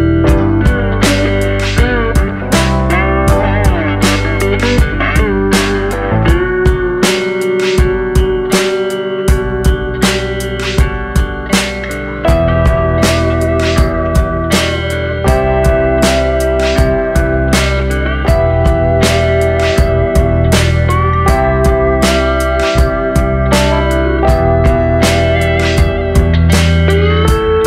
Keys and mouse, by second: 2.6 middle drag, 3.0 shift+middle drag, 3.3 middle click, 3.8 shift+middle drag, 5.2 shift+click, 6.6 shift+click, 7.0 middle click, 7.4 shift+middle click, 7.7 middle click, 8.8 e, 10.0 click, 10.5 middle drag, 11.2 middle click, 11.5 Tab, 12.0 middle click, 12.4 shift+middle click, 12.9 middle click, 13.7 shift+middle drag, 14.4 middle click, 14.7-15.0 middle drag, 15.3 shift+middle click, 15.5 middle drag, 16.1-16.7 middle drag, 16.9 shift+middle click, 17.5 middle drag, 18.0 shift+middle drag, 18.3 middle drag, 19.9 middle drag, 20.4 shift+middle click, 20.7 middle click, 21.3 shift+middle click, 21.6 middle click, 24.3-27.6 drag.